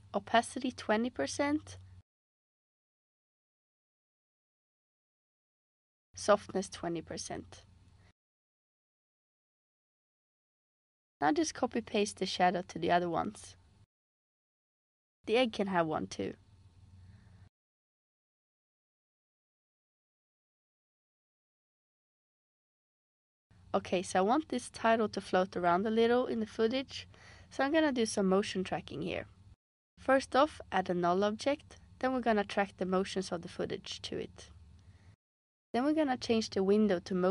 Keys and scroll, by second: 0.8-1.7 typing, 2.4 Return, 5.8-6.1 typing, 7.0 Return, 10.9 super+c, 13.5 super+v, 16.1 super+v.